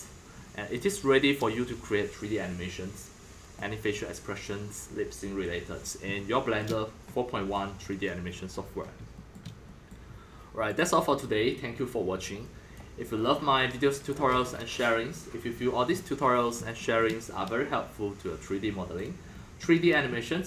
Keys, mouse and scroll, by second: 4.8 scroll, 5.5 middle click, 5.5 scroll, 5.6 middle click, 5.7 middle drag, 6.1-10.7 shift+middle drag, 10.7-15.5 drag, 15.5-16.5 scroll down 8, 16.5-20.4 shift+middle drag.